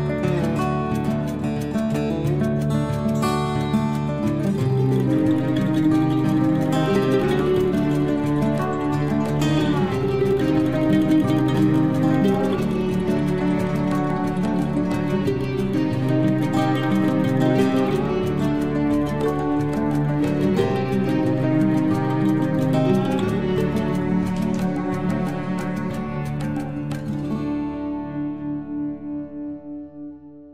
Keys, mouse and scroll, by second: 0.6 scroll up 1, 1.7 click, 2.9-4.0 typing, 6.6 click, 7.8 9, 8.0 Return, 10.9 click, 12.1-13.6 typing, 17.4 click, 18.6 9, 18.8 Return, 19.3 space, 20.5 l, 21.2 scroll up 1, 21.9 click, 24.8 space, 25.2-25.9 scroll up 1, 26.0 l, 26.3-26.8 scroll up 1, 26.8 click, 29.2-30.2 scroll down 1, 30.2 scroll up 1.